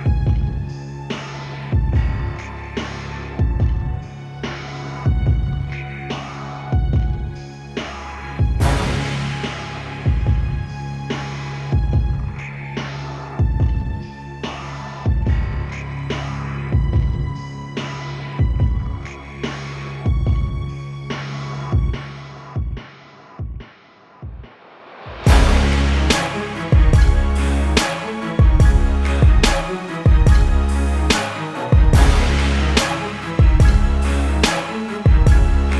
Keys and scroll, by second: 7.7 z, 21.7 z.